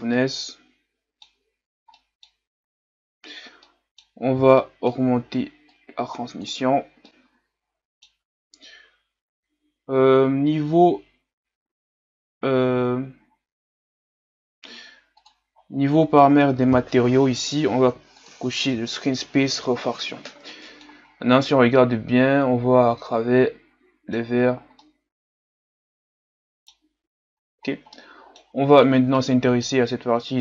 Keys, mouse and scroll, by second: 0.2-6.0 middle drag, 6.0-7.0 drag, 7.0-18.4 middle drag, 18.4-19.6 drag, 20.5 middle click, 21.0-21.4 scroll up 1, 21.4-24.4 middle drag, 24.4-24.8 scroll up 1, 24.8-27.3 middle drag, 27.3-27.9 scroll down 1, 27.9-30.4 middle drag.